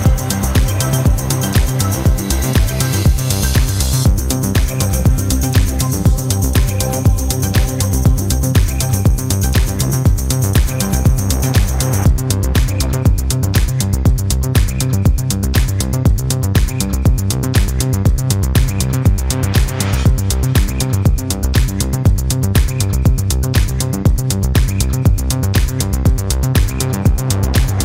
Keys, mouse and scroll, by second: 2.7-4.5 drag, 4.9-10.0 drag, 10.3-12.6 drag, 13.2-14.9 drag, 16.2-17.9 drag, 19.6 click, 22.0 click, 24.1-25.5 drag.